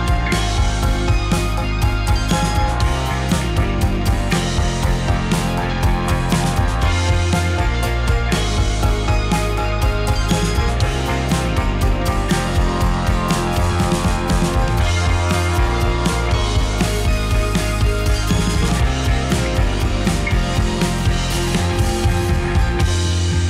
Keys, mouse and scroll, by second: 2.4 drag, 2.5-2.8 middle drag, 2.8 click, 3.0-3.9 middle drag, 4.3 click, 5.3 drag, 5.6 r, 6.7 click, 6.8-7.7 middle drag, 8.4-8.8 middle drag, 8.8 click, 12.9 click, 13.7-14.7 middle drag, 14.8-15.2 middle drag, 15.2 r, 15.5 drag, 15.6-16.8 middle drag, 16.8 click, 17.2-17.9 middle drag, 17.9 r, 19.5 drag, 19.6-20.2 middle drag, 20.2 click, 20.5 middle click, 21.0 r, 21.6 click, 21.7-23.4 middle drag.